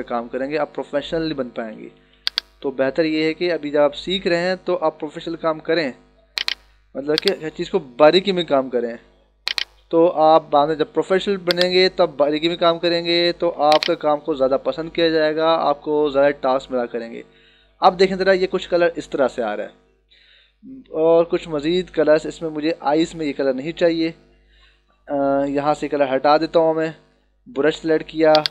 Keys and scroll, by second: 1.5 [, 16.4 -, 20.0 ctrl+=, 22.9 ctrl+=, 23.7 b.